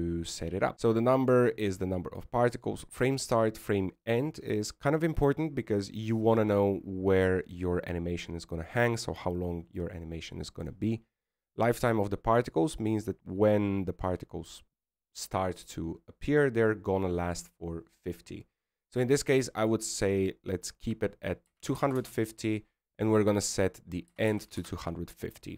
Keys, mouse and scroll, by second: 0.7 shift+middle click, 21.4 click, 25.2 click.